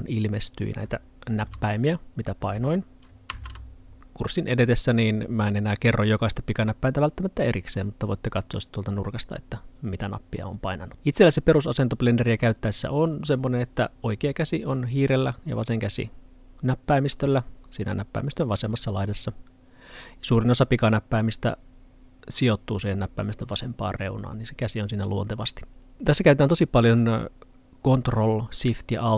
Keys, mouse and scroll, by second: 1.5 h, 3.3 h.